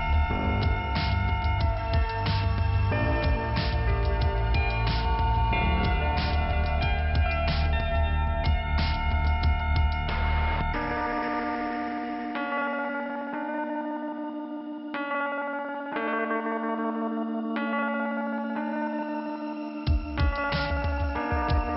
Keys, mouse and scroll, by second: 1.3 click, 2.9 click, 3.3 click, 3.7 scroll down 2, 5.3 right click, 6.7 click, 10.0-10.5 scroll up 1, 11.2 click, 12.9 click, 13.0 click.